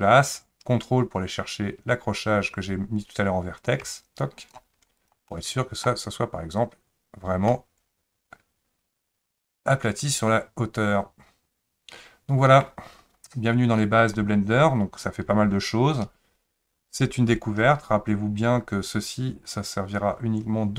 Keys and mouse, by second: 0.1-4.5 drag, 5.3 middle click, 7.5-12.6 middle drag.